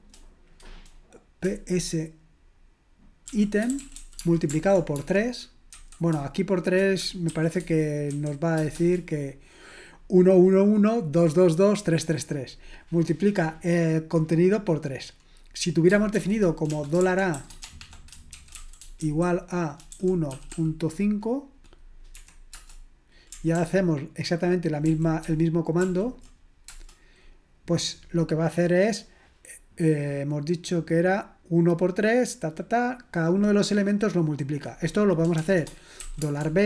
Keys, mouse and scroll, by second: 4.0-5.7 typing, 7.3-8.8 typing, 18.8-21.0 typing, 25.2 ctrl+p, 25.8 ctrl+p, 26.7 Return, 26.7 typing, 35.3-36.0 typing.